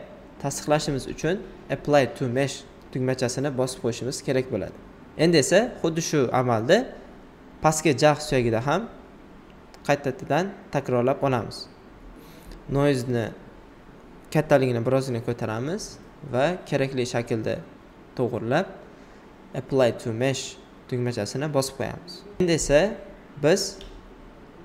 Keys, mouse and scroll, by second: 1.0 alt+right click, 3.1 alt+click, 3.7 alt+right click, 5.4 alt+right click, 6.5-10.9 alt+drag, 10.9-19.4 alt+drag, 20.3 alt+right click, 21.1 alt+right click, 23.8 click.